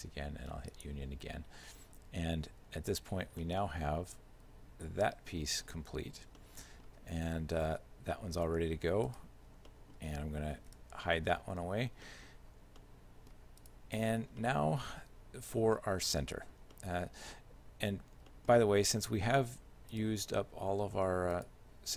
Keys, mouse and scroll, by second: 0.8 click, 2.6 z, 3.5 shift+middle click, 6.0 z, 6.4 shift+middle click, 7.6 r, 9.6 scroll down 1, 9.7 middle click, 10.8 h, 11.4 middle click, 12.1 middle click, 12.8 shift+middle click, 13.7 right click, 14.5 shift+middle click, 16.6 scroll down 1, 16.8 middle click, 17.4 shift+middle click, 18.1-19.0 scroll down 2, 18.3 middle click, 20.0 right click, 21.4 shift+right click.